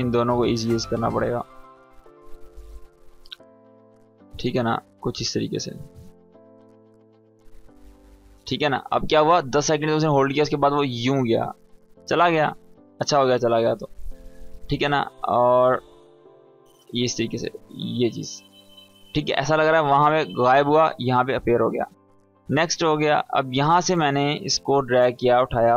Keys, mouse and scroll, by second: 5.2-5.8 drag, 6.6 space, 8.1-10.0 drag, 10.1 space, 11.3-12.6 drag, 15.4 space, 16.3-16.9 click, 16.8 space, 18.6-19.2 drag, 20.4 space, 22.1-23.0 drag.